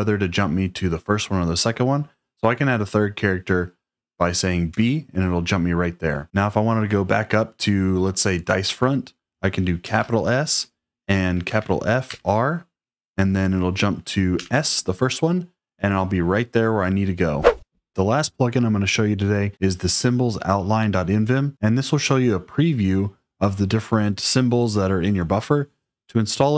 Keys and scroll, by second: 4.6 b, 9.7 shift+s, 11.4 shift+f, 11.9 r, 14.3 s.